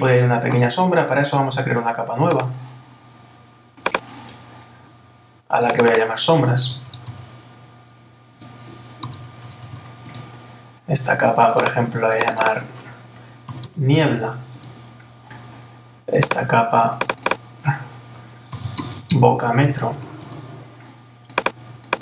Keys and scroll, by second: 10.1 Return, 14.6 Return, 20.2 Return.